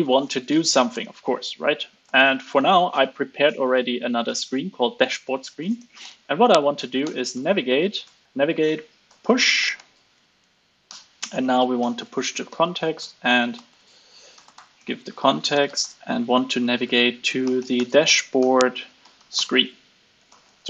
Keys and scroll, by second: 0.2 alt+9, 8.0 alt+BackSpace.